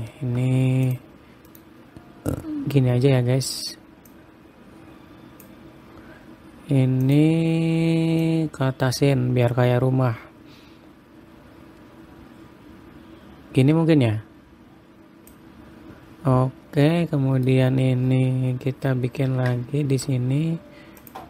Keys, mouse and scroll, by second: 0.2 ctrl+r, 4.6 click, 7.6 click, 8.7 click, 17.4 middle click, 19.9 ctrl+r.